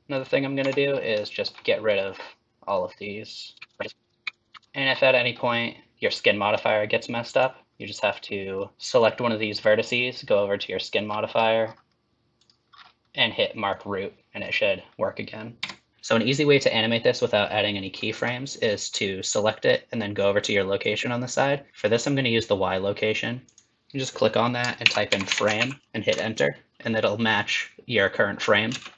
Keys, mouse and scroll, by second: 0.1 click, 0.6 Tab, 0.9 scroll up 3, 1.2 shift+middle click, 1.9 click, 3.7 x, 3.7 shift+middle click, 3.9 click, 4.0 click, 4.2 x, 4.4 click, 4.6 click, 4.6 x, 4.6 ctrl+z, 4.6 shift+middle click, 5.2-5.9 scroll down 1, 7.3 click, 8.2 scroll down 1, 8.5 scroll up 2, 8.7 shift+middle click, 8.7 scroll down 2, 9.0 click, 10.6-12.4 scroll down 16, 12.4 click, 12.7-13.1 scroll down 3, 13.7 click, 15.6 Tab.